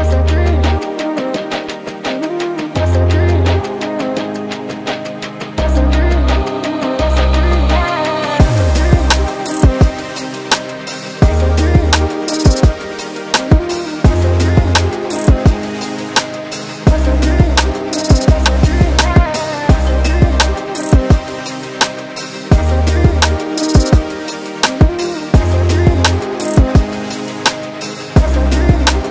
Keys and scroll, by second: 0.2 s, 2.2 ctrl+z, 3.6-4.6 typing, 6.0 m, 9.1 space, 12.4 space, 14.6 m, 18.9 /, 21.5 5, 21.6 Return, 25.6 space, 27.8 m.